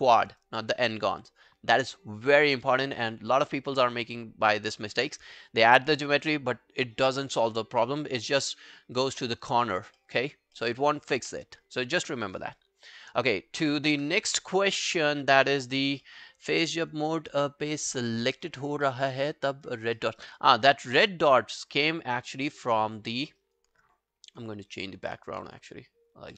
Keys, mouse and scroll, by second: 9.3 alt+middle click, 10.0 alt+middle click, 10.4 alt+scroll down 1, 10.6 alt+middle click, 10.8 alt+right click, 11.2 w, 11.4 right click, 15.7 scroll down 1, 16.1 alt+middle click, 16.3 alt+right click, 16.5 alt+click, 16.8 alt+right click, 17.2 alt+click, 18.5 alt+right click, 18.9 alt+middle click, 19.1 alt+right click, 19.4 alt+click, 19.7 alt+right click, 20.0 alt+middle click, 20.2 alt+right click, 20.7 alt+middle click, 22.6 alt+middle click, 22.9 alt+right click, 23.1 alt+click, 23.4 alt+right click, 24.3 alt+b, 25.0 alt+b, 25.4 alt+b.